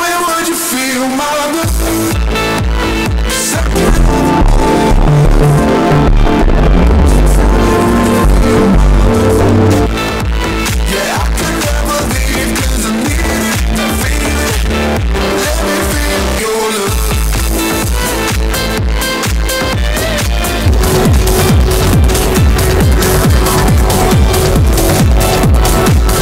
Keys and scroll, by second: 9.9 Page_Down.